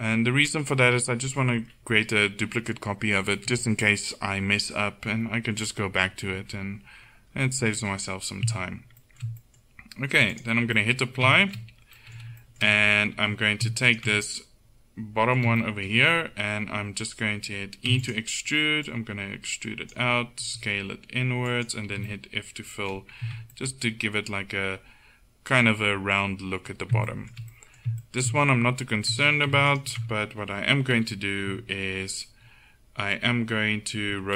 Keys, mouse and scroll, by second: 0.6-6.8 middle drag, 10.4-12.2 drag, 13.2 Tab, 13.9 right click, 14.4-15.8 middle drag, 17.9 e, 20.4 s, 21.9 f, 23.3 Tab, 24.6 middle click, 29.2 Tab, 29.8 click, 31.0 KP_1, 31.5 KP_3.